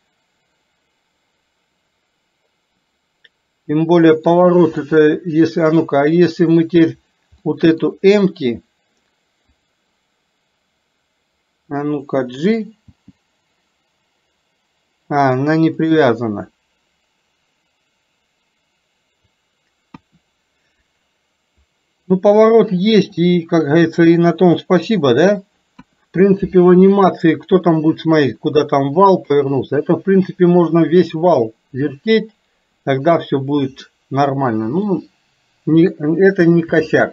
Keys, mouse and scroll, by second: 4.9-7.0 middle drag, 7.5 middle click, 9.7 click, 12.9 g, 20.0 KP_1, 23.2 scroll up 1, 23.4-25.5 middle drag, 25.5 scroll down 1, 25.9 KP_1, 29.2 scroll up 1, 29.4-29.9 middle drag, 33.9 middle click, 34.9 scroll down 1.